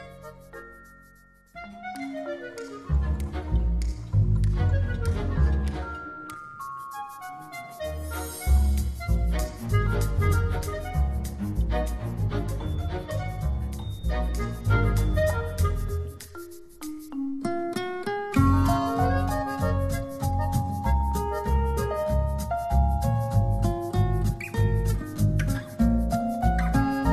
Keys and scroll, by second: 10.3 super+0, 14.2 Return, 18.2 ], 26.2 [.